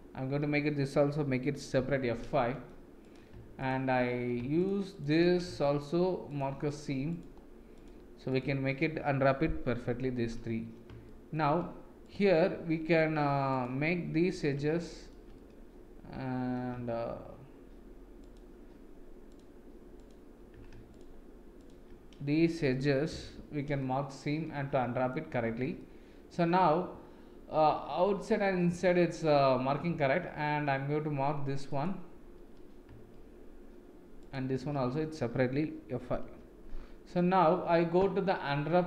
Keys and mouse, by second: 1.7 F5, 2.2 middle click, 3.0 click, 4.5 shift+click, 4.9 shift+click, 5.6 shift+middle click, 7.1 shift+click, 8.2 shift+click, 9.7 F5, 11.0 middle click, 12.0 click, 12.4 middle click, 13.5-14.5 drag, 14.7 shift+middle click, 15.3-16.5 middle drag, 19.9 shift+click, 23.2 F5, 23.8-25.1 middle drag, 25.7 middle click, 26.6 middle click, 28.5 middle click, 31.7-32.8 alt+drag, 36.2 F5, 37.1 middle click.